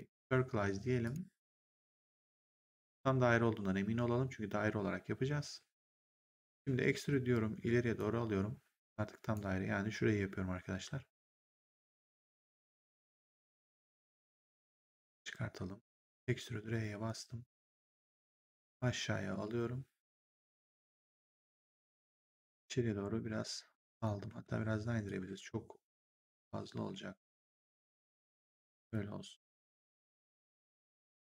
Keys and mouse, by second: 0.9 click, 2.4 click, 6.4 click, 6.9 w, 11.5 click, 16.0 click, 16.4 r, 21.1 w, 21.8 click, 24.2 r, 24.9 click.